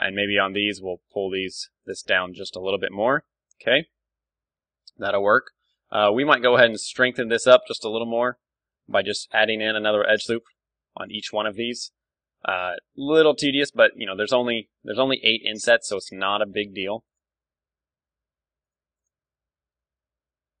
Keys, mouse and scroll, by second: 0.5 middle click, 0.8 g, 1.2-2.8 right drag, 1.9-3.8 drag, 1.9 Tab, 3.3 Tab, 4.1 a, 4.5-6.5 middle drag, 5.6 ctrl+r, 8.2-9.9 drag, 8.4 Tab, 9.0 Tab, 9.9 ctrl+r, 11.0-12.8 drag, 12.8 ctrl+r, 12.8 middle click, 13.8-15.6 drag, 15.0-16.6 middle drag, 15.5 ctrl+r, 17.1-19.0 drag, 17.9 ctrl+r, 19.0 right click, 19.1 ctrl+z, 19.3-20.6 middle drag, 20.2 ctrl+r.